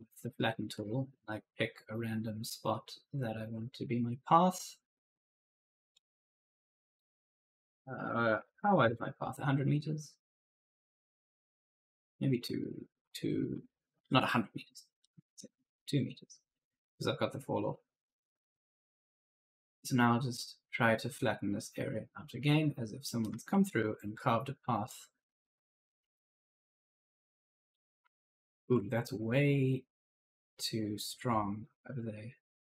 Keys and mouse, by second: 0.2 right click, 0.3 a, 0.6 w, 4.2 click, 6.8 click, 8.2 1, 8.7 Return, 10.4 click, 12.6 click, 12.9-16.0 typing, 14.9 right click, 15.5 right click, 17.5 click, 22.9-24.3 typing, 23.1 right click, 24.7 click, 27.7-28.6 typing, 27.8 right click, 29.1 click, 32.5 click.